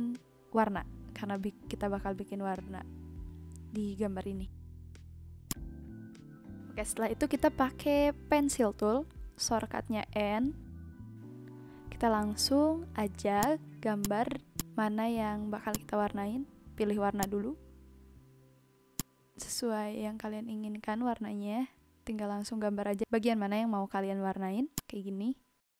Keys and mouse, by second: 5.4 click, 13.3 click, 15.7 click, 16.2 ctrl+z, 17.2 click, 18.6 z, 18.9 click, 24.7 click.